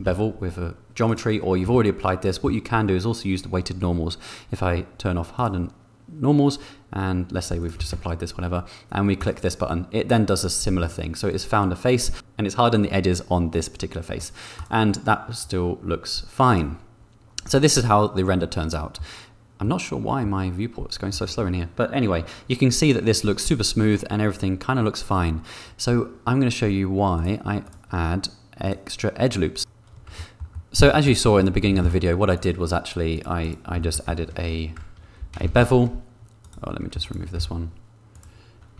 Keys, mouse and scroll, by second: 0.1 ctrl+b, 1.9 Tab, 5.3 click, 7.6 click, 7.9 ctrl+a, 9.1 click, 9.7-10.7 middle drag, 14.1 middle click, 14.5 middle click, 16.4 click, 18.9 middle click, 19.6 middle click, 27.1 click, 27.6 click, 28.6 click, 30.1 click, 30.5 click, 30.9 shift+click, 31.2 click, 31.6 shift+d, 31.8 z, 32.3 click, 33.8 shift+middle click, 34.3 Tab, 35.4 a, 35.7 ctrl+b, 37.4 x.